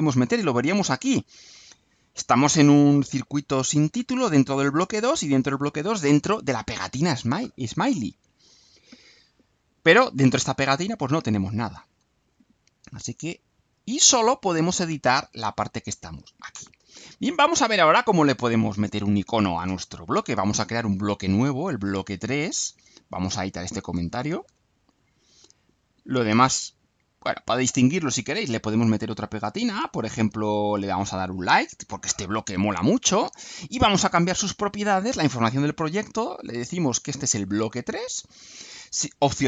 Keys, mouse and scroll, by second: 12.4 click, 14.0 click, 19.4 click, 22.3 click, 23.2 click, 23.9 BackSpace, 24.4 3, 25.2 click, 26.6 click, 30.6 click, 31.9 click, 34.6 click, 35.6 click, 36.4 BackSpace, 37.0 3, 38.6 click.